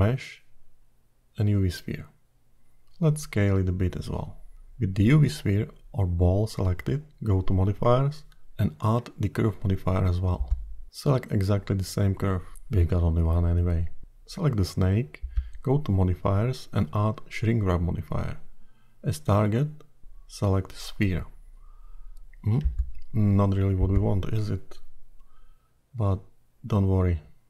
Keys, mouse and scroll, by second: 2.7 s, 6.9 click, 9.1 click, 12.6-13.0 scroll up 4, 14.4 click, 16.3 click, 22.0 click.